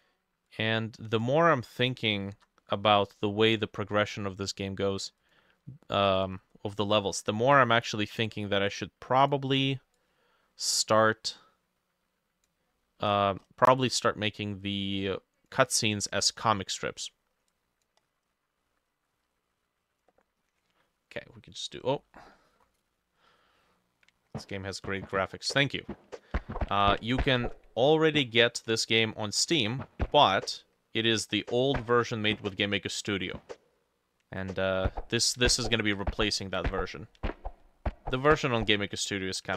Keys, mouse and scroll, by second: 2.2 ctrl+middle click, 2.4 ctrl+z, 3.3-3.7 scroll down 4, 3.7-6.3 scroll up 5, 7.9 ctrl+middle click, 8.0 ctrl+z, 12.8 middle click, 13.1-16.1 scroll up 9, 18.1-18.7 scroll down 7, 18.7 middle click, 18.9 scroll down 1, 20.6 F5, 22.1 click.